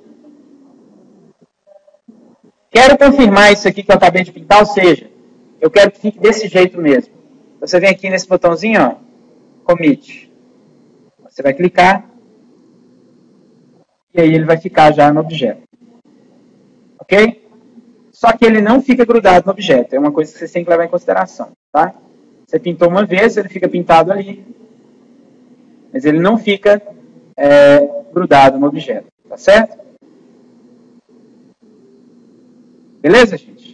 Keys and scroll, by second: 20.3 ctrl+z, 26.2 F9.